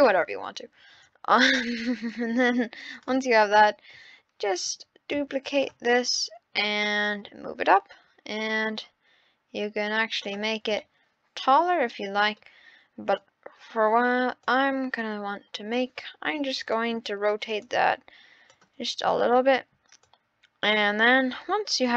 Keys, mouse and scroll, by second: 2.9 click, 3.4 scroll down 3, 3.6-4.1 middle drag, 4.1-4.9 scroll up 4, 5.1 shift+d, 7.0 click, 10.5 scroll down 5, 10.8-12.3 middle drag, 12.4-12.9 scroll up 3, 13.1-14.5 drag, 16.6-17.7 drag, 19.3 ctrl+z, 20.0 click.